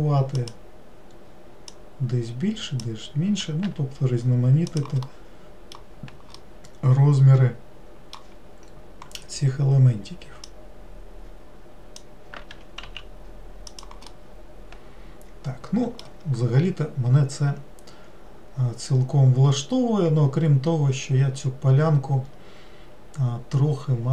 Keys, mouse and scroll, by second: 1.7 click, 5.1-9.4 middle drag, 10.5 click, 14.1-17.1 middle drag.